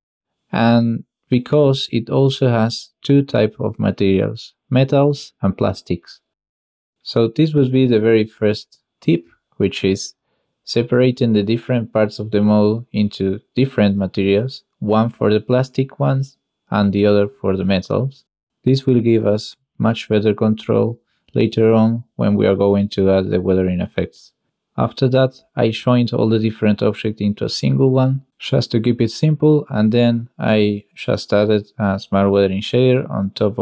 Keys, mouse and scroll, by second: 4.3-6.1 drag, 5.0 BackSpace, 8.0 click, 8.7 click, 9.0 Tab, 9.3 alt+a, 9.7 l, 10.4 l, 11.3 click, 11.7 click, 12.5 click, 13.4 Tab, 17.9 ctrl+shift+click, 18.5 ctrl+shift+click, 19.1 ctrl+shift+click, 19.7 ctrl+shift+click, 20.8 ctrl+shift+click, 22.0 click, 22.9 ctrl+shift+click, 23.4 ctrl+shift+click, 24.0 ctrl+shift+click, 24.6 ctrl+shift+click, 25.7 ctrl+shift+click, 26.9 click, 29.1 n, 30.1 click, 30.6 click.